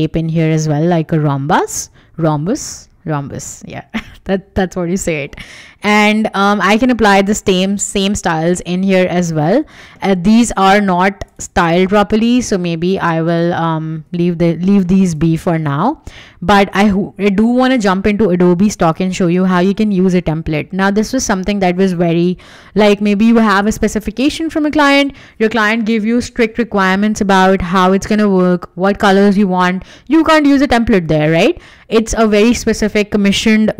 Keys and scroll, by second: 6.4 w, 13.8 Escape.